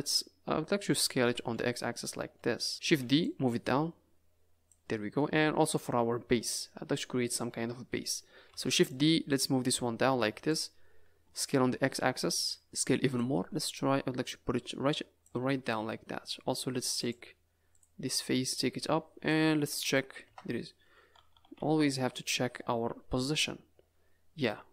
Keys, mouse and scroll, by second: 1.2 s, 2.7 middle click, 2.8 shift+d, 3.6 click, 4.9 middle click, 5.6-6.2 scroll down 4, 6.3 middle click, 8.5 shift+d, 9.3 click, 11.2 s, 12.6 middle click, 12.6 s, 13.3 middle click, 13.4 click, 15.4 Tab, 15.6 middle click, 17.0 click, 17.7 click, 18.4 click, 19.4 Tab, 20.2 KP_0, 21.1 a, 21.3 a, 21.6 z, 22.8-23.1 scroll up 3, 23.2 n, 24.1 scroll down 4.